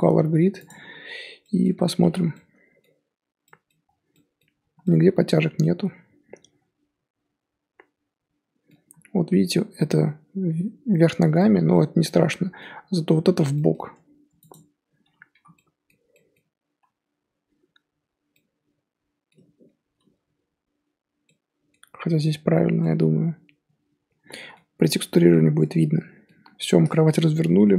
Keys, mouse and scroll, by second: 1.3-1.7 scroll up 2, 1.4 middle drag, 1.7 Tab, 2.1 z, 2.3-3.1 middle drag, 3.1 scroll up 1, 3.5-3.8 middle drag, 3.8-4.1 scroll down 3, 4.1-4.5 middle drag, 4.5 scroll up 3, 4.8-8.1 middle drag, 11.3-14.1 middle drag, 14.1 Tab, 14.4 click, 15.3 l, 15.5-16.7 middle drag, 16.7 l, 18.3-24.8 middle drag, 24.8 scroll down 1, 25.1 Tab, 25.3-27.7 middle drag.